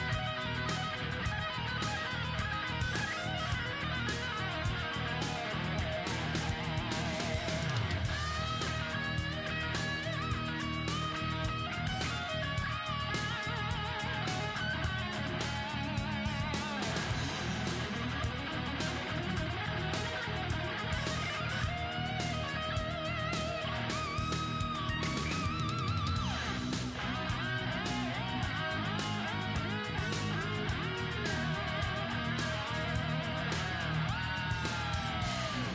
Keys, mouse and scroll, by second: 2.0 click, 2.0-3.7 middle drag, 3.0 ctrl+0, 3.8 middle click, 5.3-7.8 right drag, 6.5 g, 7.8 middle click, 8.1-12.2 right drag, 11.0 g, 12.2 middle click, 13.1-15.9 middle drag, 14.3 g, 16.0-19.9 right drag, 16.6 g, 17.7 g, 18.9 g, 19.9 middle click, 21.0 g, 22.2-24.5 right drag, 23.3 g, 23.5-26.1 middle drag, 24.7-28.6 right drag, 25.3 g, 27.0 middle click, 27.3 g, 28.6 middle click, 28.7-30.6 right drag, 28.8 g, 30.6 middle click, 31.0-32.7 right drag, 31.7 g, 32.7 middle click, 33.2 g, 34.0 right click, 34.2 g.